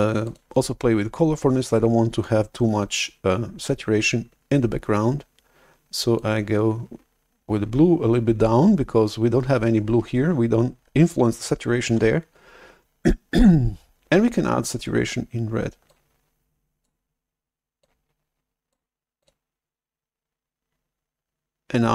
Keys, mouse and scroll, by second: 0.2 click, 6.1-8.4 drag, 11.9 shift+super+F11, 15.9 click, 17.7 click, 19.1 click.